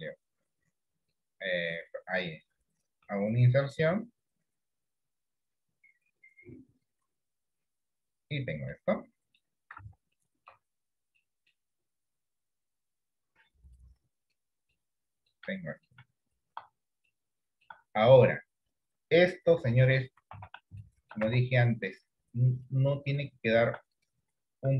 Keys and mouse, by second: 8.9 middle click, 9.9 Tab, 10.3 middle click, 10.6 Tab, 11.4 middle click, 13.9 click, 15.0 middle click, 15.7 shift+middle click, 17.2 shift+middle click, 20.4 Tab, 21.0 middle click, 21.4 Tab.